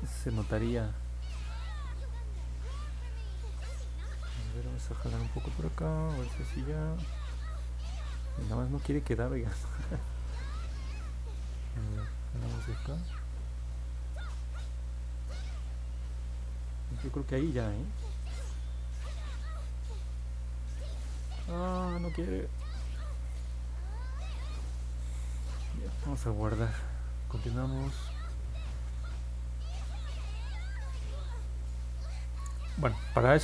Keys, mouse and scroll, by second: 3.7 click, 11.3-12.7 drag, 17.2 click, 20.2 click, 21.2 click, 26.0 ctrl+s.